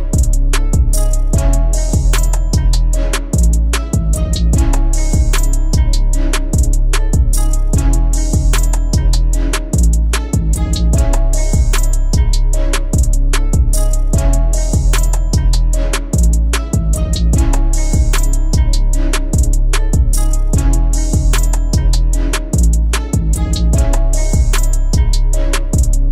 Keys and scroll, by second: 2.4 ctrl+alt+z, 2.7 ctrl+alt+z.